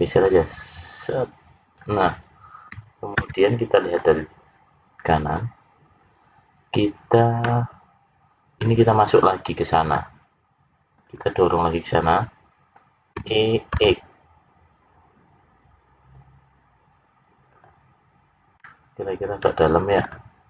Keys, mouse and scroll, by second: 0.2 click, 7.4 middle click, 9.8 click, 10.9 click, 11.3 click, 13.1 e, 18.5 middle click.